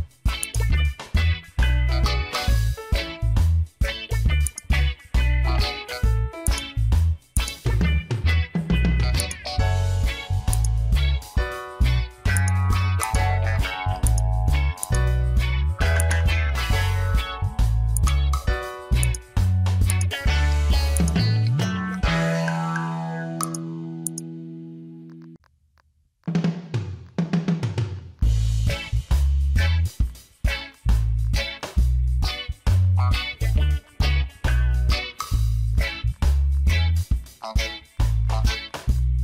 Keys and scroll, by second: 12.9 space, 23.9 space, 27.4 space, 32.4 ctrl+alt+z, 33.6 space, 35.7 space.